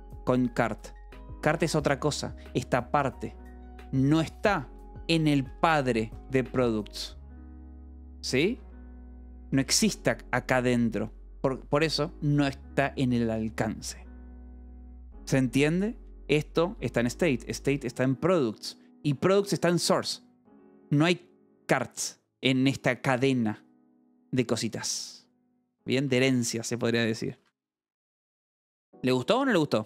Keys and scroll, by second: 0.0 j, 1.6 shift+v, 2.4 Escape, 4.7 Escape, 4.8 k, 6.4 Escape, 6.6 k, 8.1-10.0 typing, 12.6 Escape, 14.3 k, 16.3-17.2 typing, 23.8 Escape, 26.3 shift+j, 27.3 Escape, 28.7 ctrl+s.